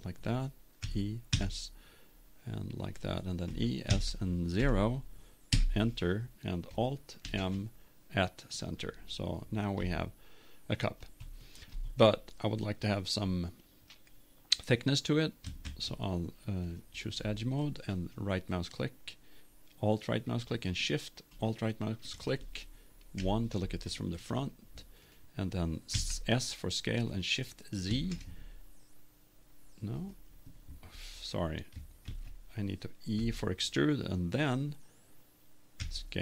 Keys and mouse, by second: 0.8 e, 3.5-4.9 drag, 3.5 e, 7.2 alt+m, 9.9-12.7 middle drag, 15.6 ctrl+Tab, 17.9-19.9 right drag, 21.7-23.2 right drag, 23.2 KP_1, 25.9 s, 30.1 click, 32.1 ctrl+z, 33.1 e.